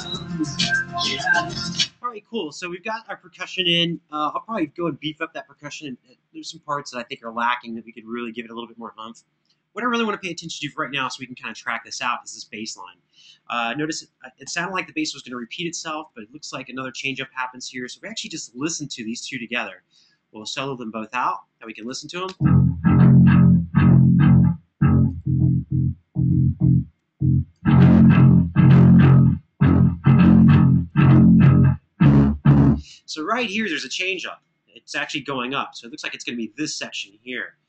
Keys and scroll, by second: 1.5 space, 14.2 Left, 22.0 space, 32.5 space.